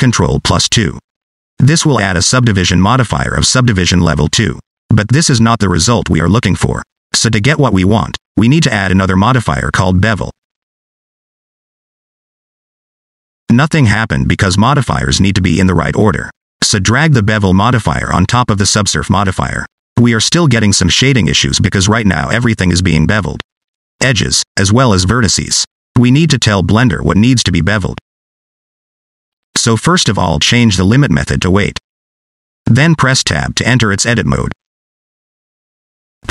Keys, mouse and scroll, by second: 3.6 click, 4.4 click, 6.7 middle click, 10.6 click, 14.0 click, 14.7 click, 18.1 click, 24.9 scroll up 2, 25.5 shift+middle click, 26.3 scroll up 3, 27.0 shift+middle click, 27.9 scroll down 1, 28.1 middle click, 29.4 middle click, 30.2 scroll down 1, 30.3 middle click, 31.3 click, 34.5 Tab, 35.7 scroll down 1, 35.8 middle click.